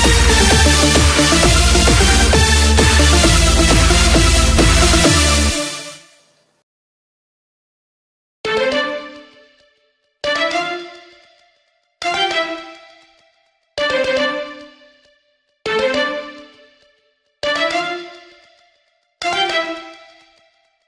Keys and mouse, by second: 17.8-20.8 right drag.